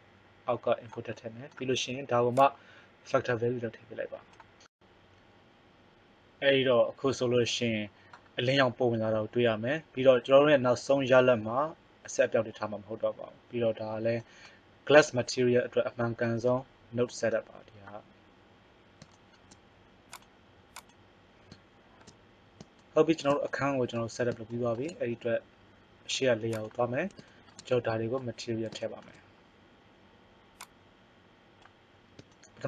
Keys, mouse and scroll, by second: 2.4 click, 13.7 middle click, 18.9 middle click, 30.6 click, 31.9 middle click.